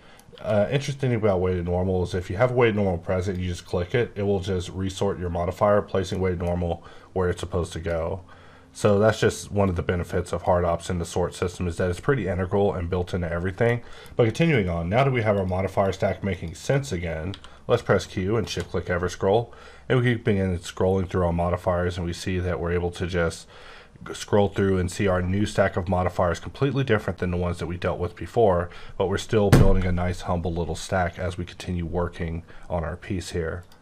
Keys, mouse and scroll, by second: 0.3 q, 3.2 click, 6.2 middle click, 6.5 scroll up 3, 7.3 click, 8.7 click, 8.8 click, 9.9 click, 11.3 click, 13.2-13.6 scroll down 2, 13.6 middle click, 15.3 click, 15.8 click, 16.6 click, 17.2 q, 18.4 shift+click, 18.9-20.2 scroll up 11, 20.6-21.6 scroll down 10, 21.6-22.6 scroll up 10, 22.8-23.4 scroll down 8, 23.4-24.6 scroll up 10, 24.6-25.2 scroll down 6, 25.2-27.8 scroll up 8, 27.9-28.5 scroll down 6, 28.6-30.8 scroll up 2, 32.7-33.5 scroll up 8, 33.5 click.